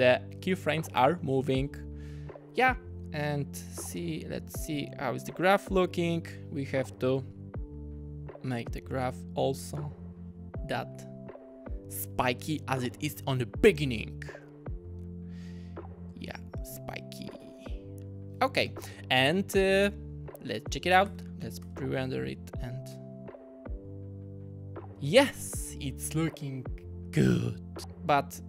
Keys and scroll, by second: 18.5 typing, 21.1 space, 21.6 space, 25.0 space.